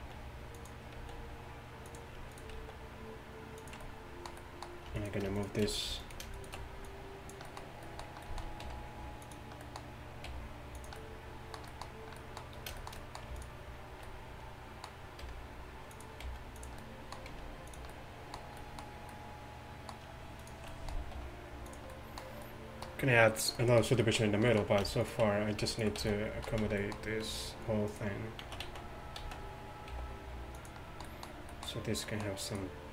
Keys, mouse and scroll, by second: 0.0 alt+s, 1.0 alt+s, 2.6 alt+s, 5.0 middle click, 6.1-8.3 right drag, 6.9-8.7 drag, 7.5 middle click, 8.7 r, 10.3 g, 11.9 click, 13.5 right click, 14.1 middle click, 15.3 r, 16.3 g, 17.4 g, 20.4 click, 21.2 r, 25.1-28.7 right drag, 26.0 z, 26.5 z, 27.3 g, 28.7 z, 29.2 z, 30.0 g, 32.5 middle click.